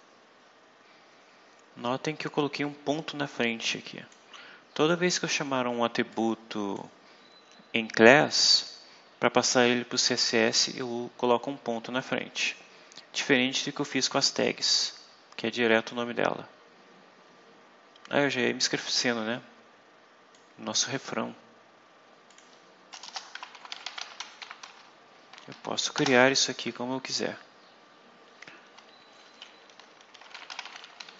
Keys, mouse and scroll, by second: 3.2 click, 4.6-5.0 scroll up 2, 5.4 scroll down 2, 6.0 click, 8.3 click, 10.1 click, 11.2 scroll down 2, 13.4-14.5 scroll up 6, 15.1 scroll down 2, 17.2 scroll down 2, 20.3 click, 21.5 scroll down 2, 22.2 click, 22.9 Return, 23.0-25.4 typing, 25.9 Return, 29.9-31.1 typing.